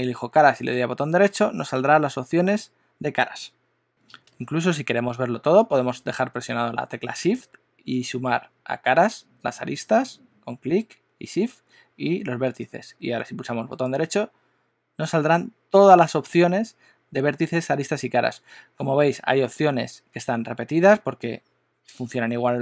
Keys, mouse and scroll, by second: 0.5 right click, 9.4 shift+click, 13.8 right click.